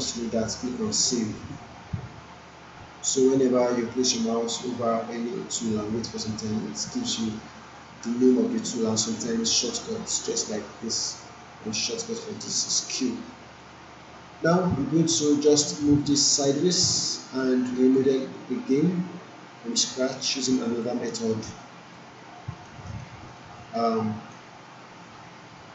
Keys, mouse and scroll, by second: 0.9 click, 13.6 click, 15.2 alt+right click, 16.6-17.4 click, 17.7 alt+middle click, 18.9-19.8 click, 20.2-20.8 alt+middle click, 20.8 alt+right click, 21.2-21.8 alt+middle click, 21.9-22.8 alt+right click, 23.0-23.6 alt+middle click, 23.8-24.4 alt+right drag.